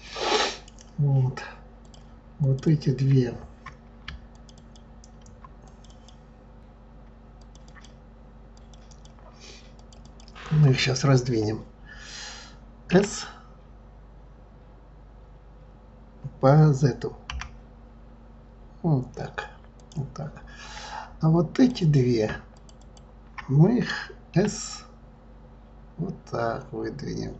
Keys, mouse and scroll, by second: 0.1 click, 1.8 click, 2.4 click, 2.6 click, 4.3 shift+click, 4.5 shift+click, 5.6 click, 5.8 click, 7.3 shift+click, 7.6 shift+click, 8.5 shift+click, 8.8 shift+click, 9.7 shift+click, 10.0 shift+click, 12.9 s, 21.5 click, 21.8 click, 22.5 shift+click, 22.8 shift+click, 24.3 s.